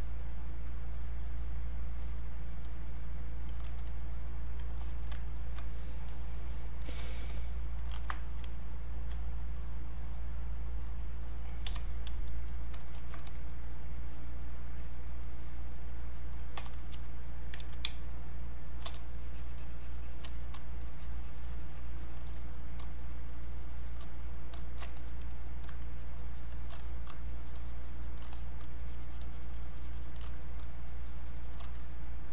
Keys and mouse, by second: 4.5 click, 4.8 alt+click, 5.3 ctrl+right click, 6.1 click, 7.9 ctrl+1, 8.3-10.0 drag, 12.1 click, 13.0 ctrl+1, 13.3 click, 17.6 alt+click, 17.8 space, 18.1 click, 18.3 space, 19.1 shift+click, 20.8-22.4 shift+drag, 23.0 shift+click, 25.8 shift+click, 27.3 shift+click, 28.8-30.3 shift+drag, 30.8 shift+click.